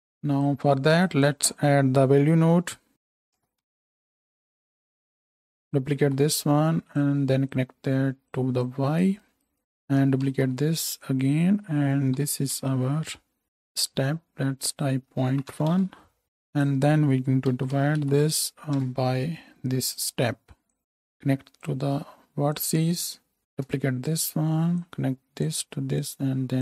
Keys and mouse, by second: 5.6 click, 6.0-7.4 shift+middle drag, 6.0 shift+d, 7.4-9.4 right drag, 9.4-9.8 middle drag, 9.8-14.6 shift+right drag, 10.3 shift+d, 12.7 F2, 14.6-20.0 middle drag, 20.0 right click, 20.8-22.6 middle drag, 22.6-26.6 drag, 23.0-24.2 middle drag, 23.0-24.2 right drag, 23.7 ctrl+shift+d, 24.8-26.6 middle drag, 24.8-26.6 right drag.